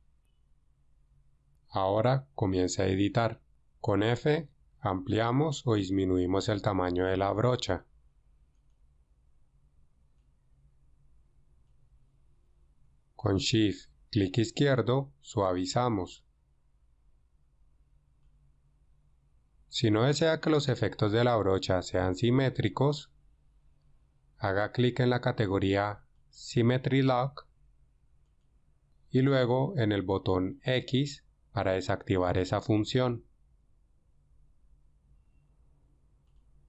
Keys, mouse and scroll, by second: 4.1 f, 9.1 drag, 10.1-11.8 drag, 14.6-16.1 shift+drag.